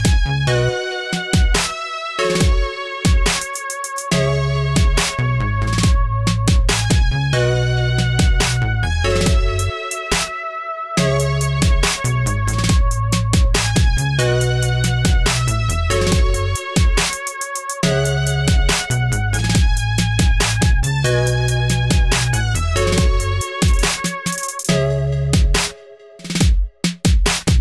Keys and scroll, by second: 1.2 ctrl+r, 5.7-8.2 typing, 11.2-12.4 typing, 13.6 ctrl+v, 14.5 ctrl+t, 15.4 ctrl+t, 16.5 ctrl+z, 16.9 ctrl+v, 18.1 Delete, 19.6 ctrl+v, 20.1 ctrl+t, 22.2 Return, 25.1-27.2 typing.